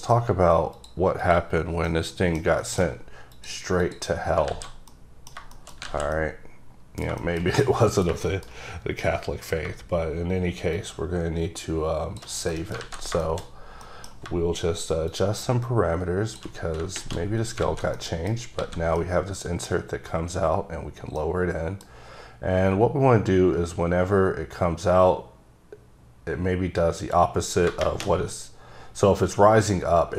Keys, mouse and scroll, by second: 0.9 click, 1.4 click, 2.0 middle click, 2.6 shift+middle click, 2.9 middle click, 3.0-3.4 scroll up 2, 3.4 click, 3.9 click, 4.6 alt+z, 5.0 middle click, 6.0 alt+z, 6.3 middle click, 8.0 middle click, 9.1-9.7 scroll down 3, 9.7-10.9 shift+scroll down 1, 11.2 shift+click, 12.6 middle click, 12.9 alt+z, 13.3 shift+middle click, 15.2 shift+click, 17.5 scroll down 3, 17.7 alt+a, 18.1 middle click, 18.6 scroll up 1, 18.7 a, 19.1 middle click, 21.3 middle click, 27.8 middle click.